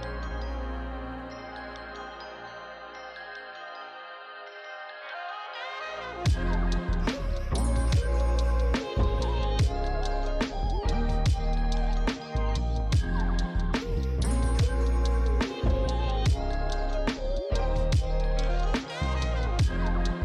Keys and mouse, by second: 11.4 click, 12.3-15.9 typing, 12.6 click, 13.2 click, 13.5 click, 13.8 click, 14.2 click, 14.6 click, 15.1 click, 15.5 click, 16.1 click, 18.1 click, 18.8 Tab, 19.2 click.